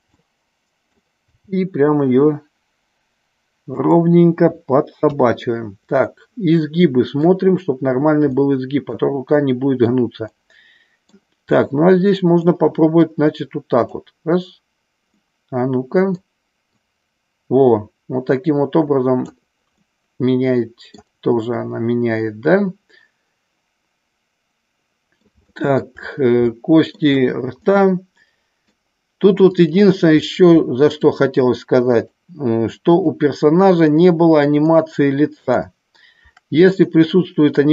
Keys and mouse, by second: 0.0 middle click, 1.3 g, 3.7 click, 4.9 KP_3, 5.9-7.3 middle drag, 8.2 middle click, 9.3 middle click, 10.3 middle click, 11.4 middle click, 13.1 click, 15.2 middle click, 16.7-19.2 drag, 19.8-20.9 middle drag, 21.4-25.3 middle drag, 25.4 shift+middle click, 26.4 shift+middle click, 27.5-28.7 middle drag, 29.6 click, 32.9 shift+click, 34.6 shift+click, 36.8 shift+click.